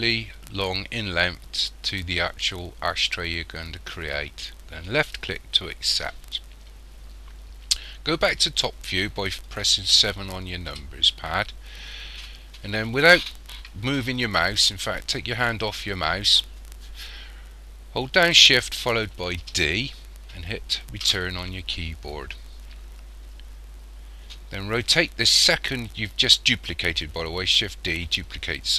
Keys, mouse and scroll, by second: 10.7 KP_7, 19.4 shift+d.